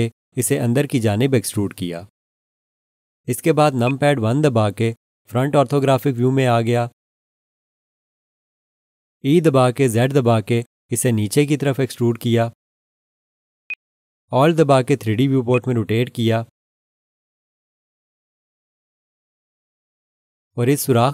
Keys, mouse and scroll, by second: 3.8 click, 5.1 1, 9.4 e, 10.1 z, 13.7 click, 15.5 alt+click.